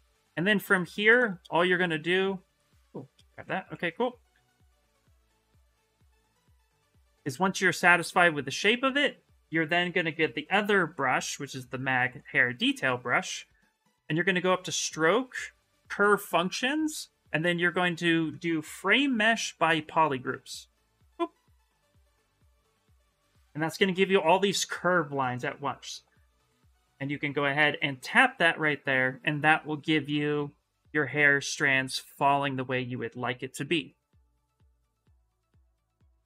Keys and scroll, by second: 1.4 2, 3.1 ctrl+z, 3.4 2, 7.9 s, 12.5 s, 18.7 shift+m.